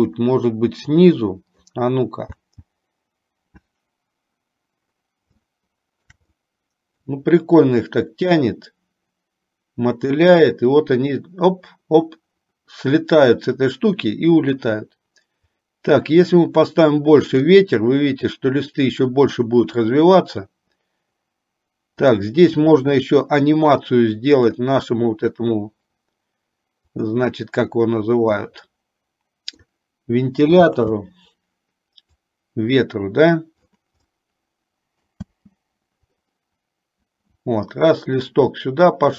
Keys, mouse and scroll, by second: 0.3-2.1 middle drag, 2.6 space, 5.7 shift+middle click, 6.6 middle click, 15.8-17.7 drag, 22.1 click, 24.7 click, 27.2 click, 28.7-29.9 middle drag, 30.9 space, 32.3-33.9 drag, 34.3-35.3 middle drag, 35.4 space, 38.7 middle click.